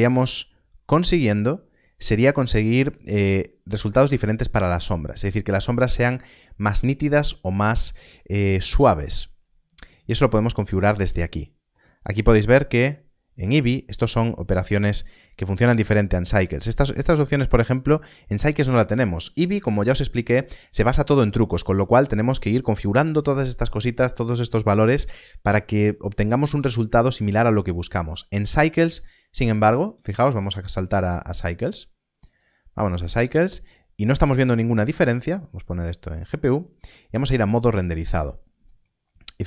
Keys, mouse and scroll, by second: 10.4 click, 30.4 click, 35.0 click.